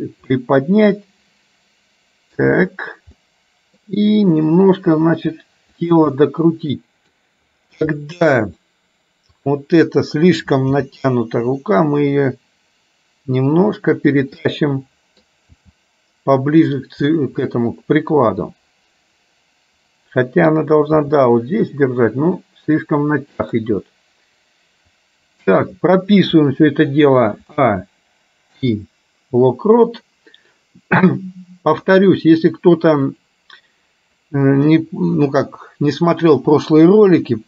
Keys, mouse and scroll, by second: 0.4-2.5 middle drag, 3.2 middle click, 5.1 r, 6.2-7.2 middle drag, 8.1 middle click, 9.5 click, 10.9 g, 14.5 middle click, 15.6 g, 17.1-20.6 middle drag, 21.0 g, 24.0-25.7 middle drag, 27.6 a, 28.7 i, 33.2-35.0 drag.